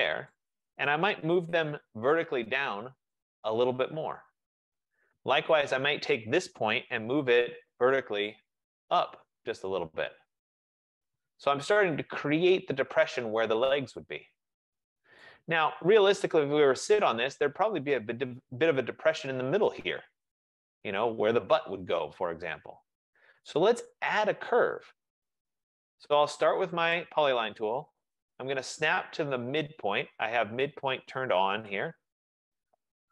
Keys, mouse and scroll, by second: 0.4 click, 1.4-3.8 typing, 3.3 click, 4.7 click, 5.7-8.0 typing, 6.2 click, 9.6 click, 11.3 click, 11.8-12.6 typing, 15.0-16.4 drag, 16.4-21.5 right drag, 24.9-27.0 right drag, 27.0 click, 31.8 click.